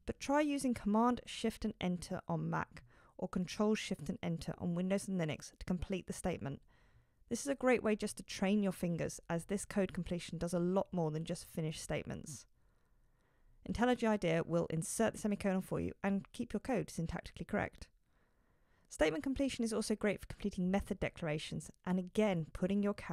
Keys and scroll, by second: 22.8 shift+super+Return.